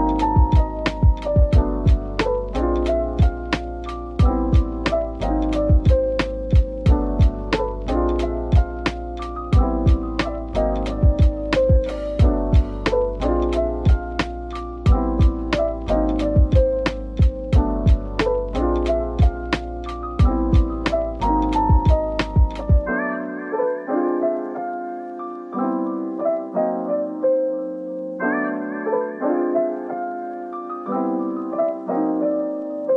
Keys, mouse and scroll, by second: 0.6-1.5 typing, 6.8-7.9 typing, 9.3-9.8 scroll up 1, 15.6-16.2 typing, 17.8 typing, 19.6 typing, 26.4 scroll down 1, 28.9 typing, 29.3 Tab, 30.1 typing, 32.5-32.9 scroll down 1.